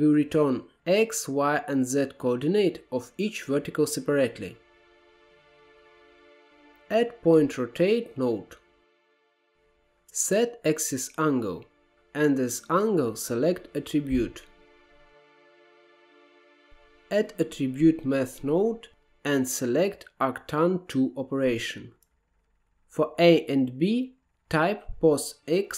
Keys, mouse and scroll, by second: 3.8 scroll down 3, 4.0 middle click, 4.4-5.1 drag, 5.3 click, 5.8 shift+a, 9.4 scroll up 1, 10.0 drag, 10.3 middle click, 10.6 scroll up 2, 10.8-14.3 drag, 15.1-16.7 drag, 16.7 shift+a.